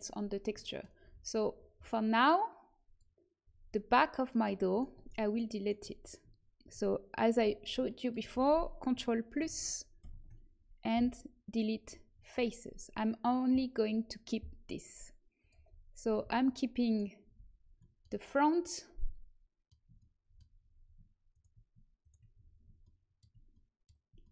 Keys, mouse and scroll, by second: 0.5 middle click, 1.0 a, 2.8-4.4 drag, 4.6 click, 4.6-7.2 right drag, 9.3 ctrl+KP_Add, 9.9 ctrl+KP_Add, 10.9 Delete, 15.3-17.7 drag, 15.6 middle click, 16.4-18.5 right drag, 17.7-20.1 middle drag, 21.2-24.3 middle drag, 21.2-22.8 right drag.